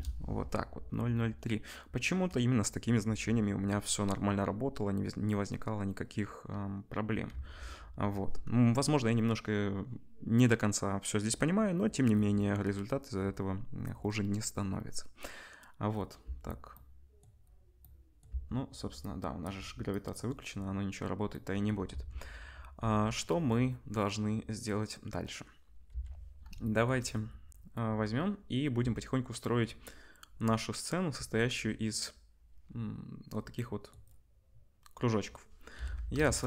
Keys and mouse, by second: 7.3 ctrl+s, 16.7 space, 18.3 space, 19.4-19.9 middle drag, 21.9 ctrl+s, 25.9 KP_1, 26.6-36.4 shift+drag, 35.7 KP_1, 36.2 shift+a.